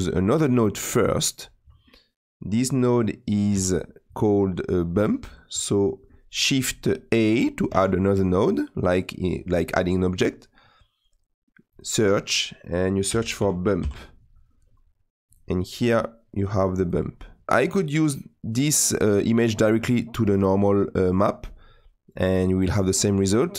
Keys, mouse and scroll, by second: 18.5-20.2 drag.